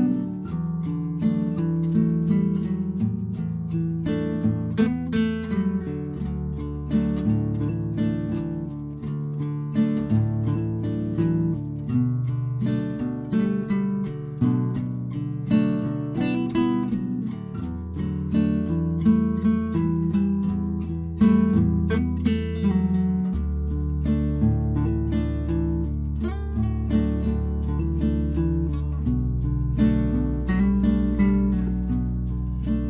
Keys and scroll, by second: 16.6 Return.